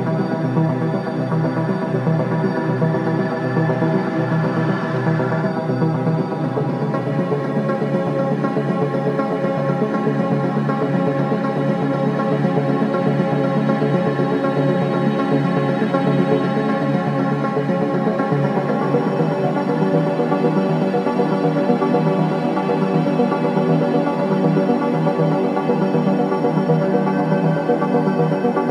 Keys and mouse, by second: 1.7-2.9 ctrl+alt+drag, 5.2 click, 5.4 click, 5.6 space, 6.2 space, 7.3 g, 8.6-11.4 drag, 9.8 typing, 11.0 typing, 13.6 typing, 15.2 click, 16.3 click, 17.4 h, 18.4 ctrl+s, 19.1-20.6 drag, 20.6 space, 23.6 space, 26.0 ctrl+s.